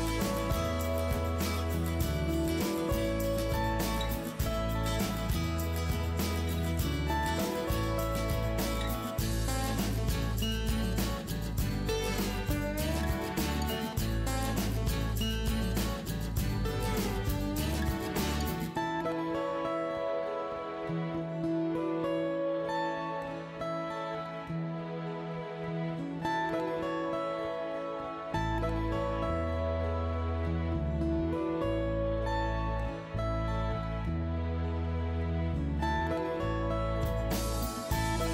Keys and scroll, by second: 0.0 Left, 0.3 Right, 0.9 Right, 1.0 Right, 1.0 Right, 1.4 Return, 15.8 Return, 26.9 Return, 34.7 Escape, 36.4 Escape, 36.9 KP_5, 37.0 Return.